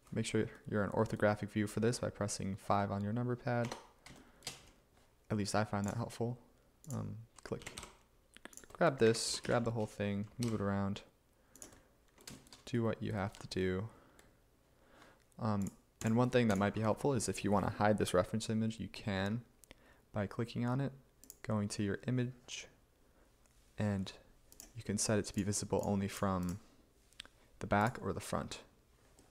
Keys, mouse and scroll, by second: 3.7 Tab, 7.7 g, 9.1 a, 9.4 g, 9.5 a, 10.5 a, 12.2 y, 12.6 y.